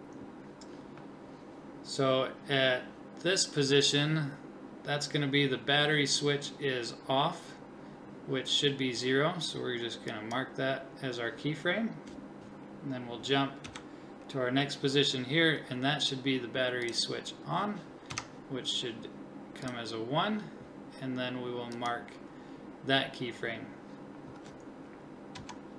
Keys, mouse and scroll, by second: 13.7 Right, 25.4 Left.